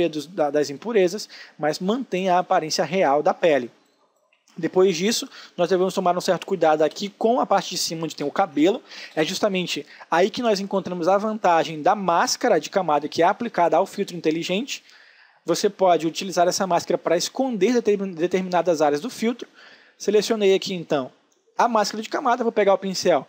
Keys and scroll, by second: 1.8 space, 22.1 b.